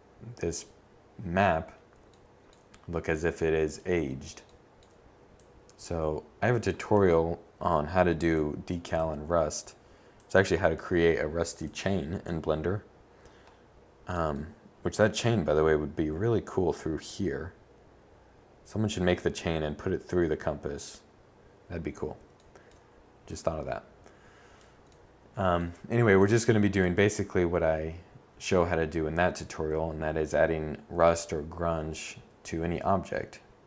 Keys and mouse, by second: 4.4 click, 6.3 click, 6.9 click, 11.3-15.6 middle drag, 21.1-25.9 drag, 25.9-32.8 middle drag, 32.8 click.